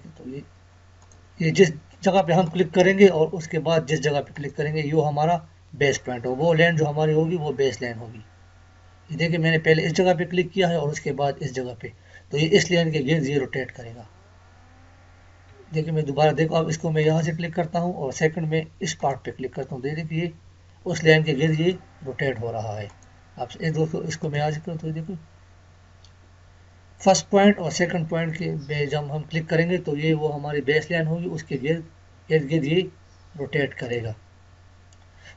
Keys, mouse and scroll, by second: 15.5 Escape, 17.1 click, 33.8 click, 34.5 Escape.